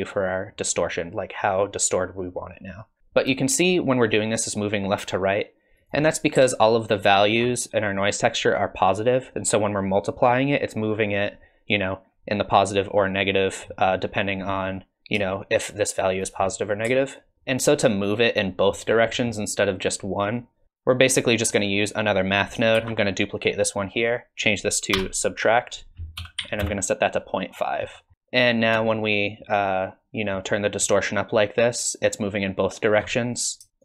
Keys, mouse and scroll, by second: 3.0 shift+middle click, 3.0 scroll down 3, 3.5 shift+click, 7.0 ctrl+shift+click, 13.7 middle click, 14.5 middle click, 15.3 shift+click, 17.2 ctrl+shift+click, 17.3 middle click, 17.9 click, 18.8 scroll down 3, 19.1 middle click, 19.7 click, 20.6 ctrl+z, 21.5 click, 22.7 shift+d, 24.4 click, 25.6 click, 27.5-27.9 scroll up 5, 27.9 middle click, 28.9 shift+click.